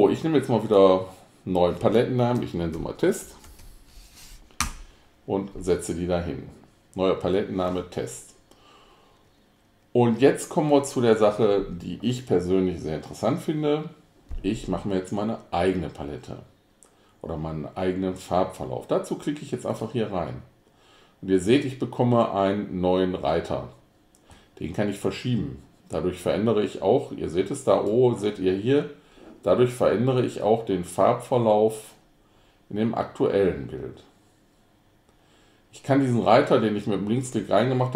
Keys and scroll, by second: 2.6-4.2 typing, 4.7 Return.